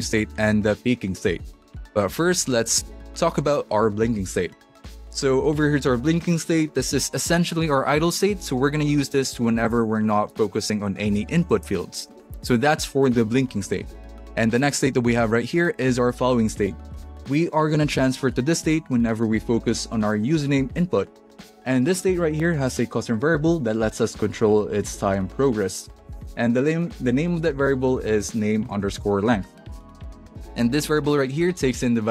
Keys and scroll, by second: 4.7 space, 15.9 space, 28.7 alt+shift+Left.